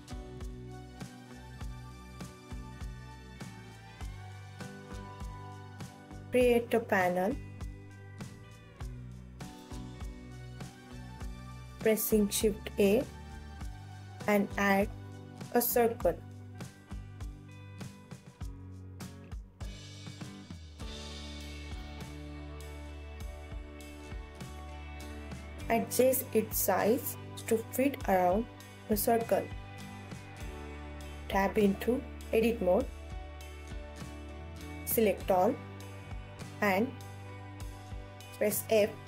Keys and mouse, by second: 0.0 KP_7, 0.0 KP_1, 0.7 ctrl+s, 3.3 middle click, 6.5 shift+click, 7.6 shift+a, 10.4 s, 14.0 click, 14.4 g, 16.2 click, 16.6 s, 18.1 click, 18.4 x, 20.3 click, 21.3 Tab, 22.4 ctrl+s, 25.2-26.6 alt+middle drag, 27.3 ctrl+s, 31.1 KP_1, 33.7 click, 36.4-37.5 alt+middle drag, 38.3 f.